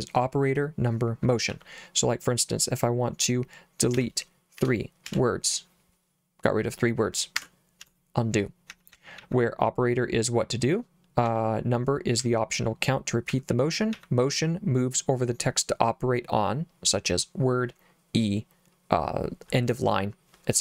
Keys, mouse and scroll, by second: 1.5 j, 4.0 d, 4.6 3, 5.0 w, 7.4 Escape, 7.8 u, 8.7 j, 8.9 j, 9.2 j, 11.3 j, 12.2 j, 13.3 j, 13.9 j.